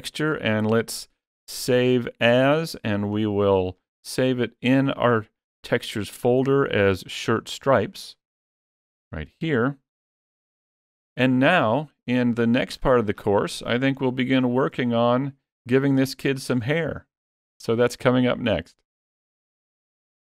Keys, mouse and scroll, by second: 0.1 click, 10.2 shift+middle click, 10.2 scroll down 1, 11.4 shift+middle click, 12.7-13.8 scroll down 17, 13.8 shift+middle click.